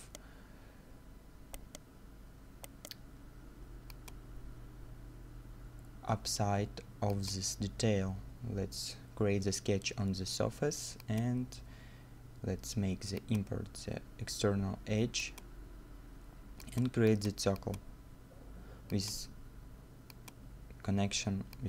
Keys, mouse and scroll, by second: 1.1 middle click, 1.6 right click, 3.3 middle click, 9.7 scroll up 1.